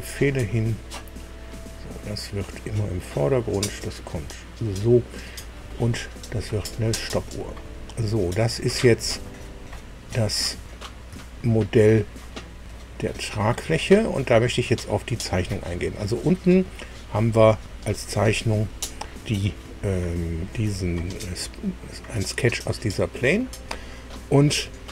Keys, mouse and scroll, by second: 0.7 click, 1.2 right click, 2.4 click, 3.2-5.6 drag, 6.3 click, 7.6 scroll down 2, 8.3 click, 9.1-10.6 ctrl+drag, 11.2 shift+click, 12.2 click, 13.2 click, 14.0 click, 15.5 scroll up 2.